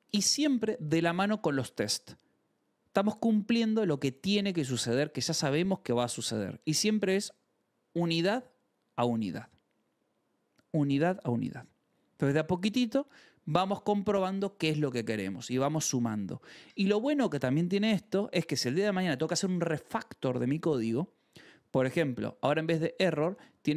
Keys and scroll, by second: 2.9 k, 4.1 j, 4.8 k, 5.2 ctrl+s, 22.4 j, 23.2 e.